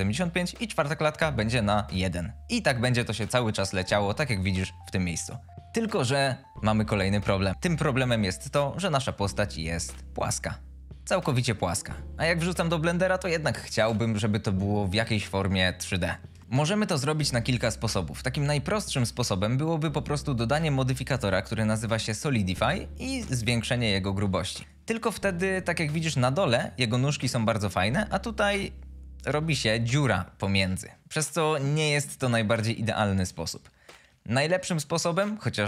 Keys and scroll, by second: 16.4 a.